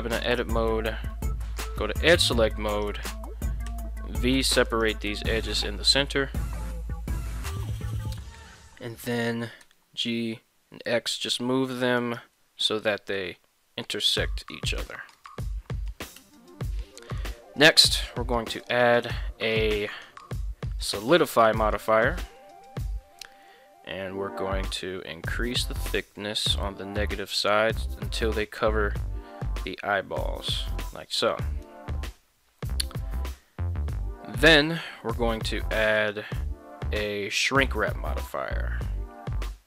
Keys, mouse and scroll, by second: 0.2 alt+right click, 1.1 2, 1.4 x, 2.7 alt+right click, 3.7 v, 4.7 right click, 6.1 middle click, 7.1 shift+middle click, 7.7 z, 8.2 shift+middle click, 9.1 g, 9.6 x, 11.1 click, 12.0 alt+right click, 12.8 g, 13.1 x, 14.7 click, 15.1 z, 16.2 Tab, 18.7-21.7 drag, 24.7-30.7 shift+drag, 36.0-39.6 drag.